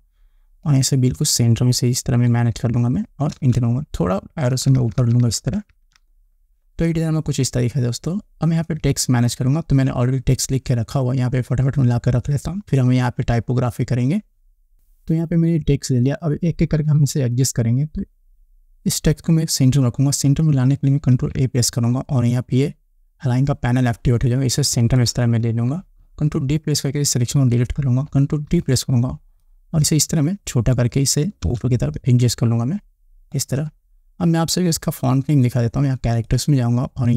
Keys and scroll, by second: 3.8 Return, 5.0 Up, 21.6 ctrl+a, 27.8 ctrl+d, 28.9 ctrl+t, 31.9 Return.